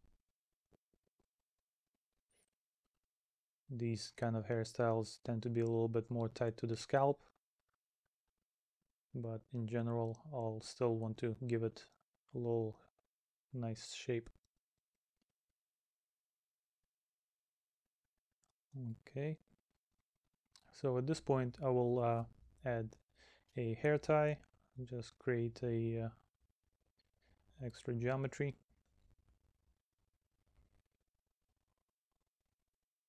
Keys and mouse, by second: 0.0 middle click, 1.4 middle click, 2.3 middle click, 3.1 middle click, 4.3 middle click, 5.8 middle click, 7.9 middle click, 9.6 middle click, 10.6 middle click, 11.4 middle click, 13.8 middle click, 14.6 middle click, 16.0 middle click, 17.4 middle click, 18.9 middle click, 20.1 middle click, 21.8 middle click, 23.5 middle click, 27.0 middle click.